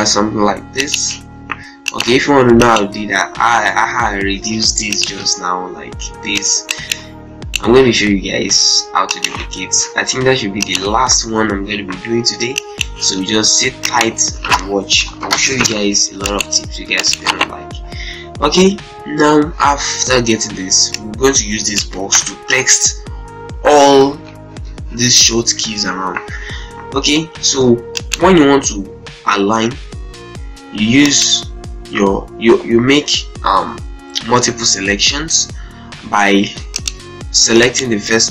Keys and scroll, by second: 4.4 Delete, 14.8 shift+Page_Up, 16.2 shift+c, 16.4 shift+e.